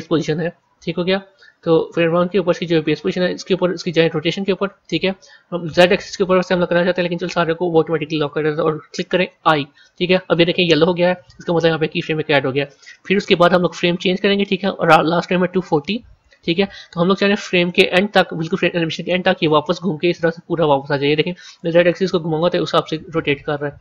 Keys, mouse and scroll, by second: 1.0 KP_1, 1.8 KP_3, 13.7-16.8 drag, 21.5-23.8 drag.